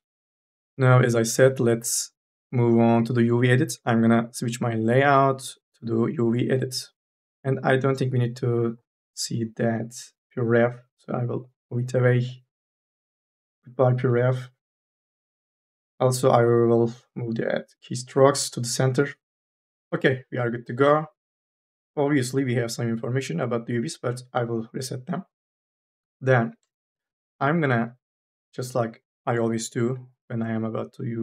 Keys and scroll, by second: 22.2 3, 24.2 ctrl+a, 26.1 2.